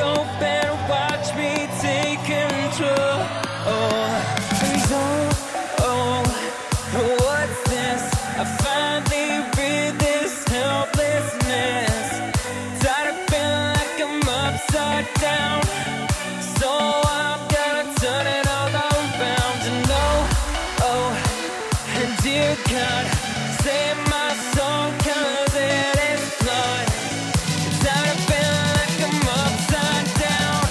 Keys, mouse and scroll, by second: 5.5-30.7 drag.